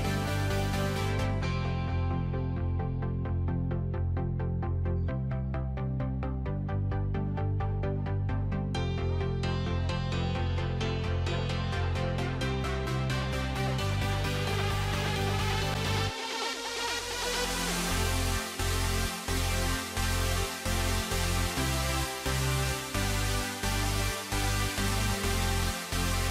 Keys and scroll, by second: 2.2 alt+x.